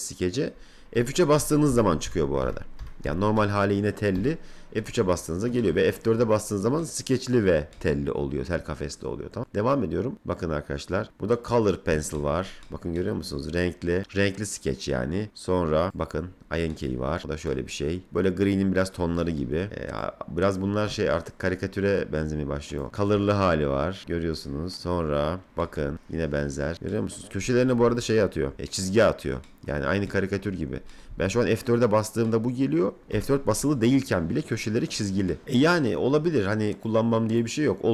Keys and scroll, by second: 0.9 F3, 4.1 F3, 28.5 F4, 31.1 F4, 33.1 F4.